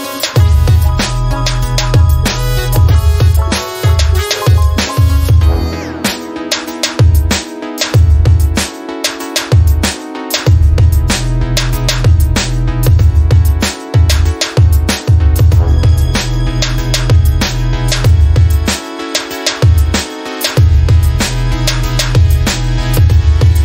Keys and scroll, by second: 21.4-23.4 typing.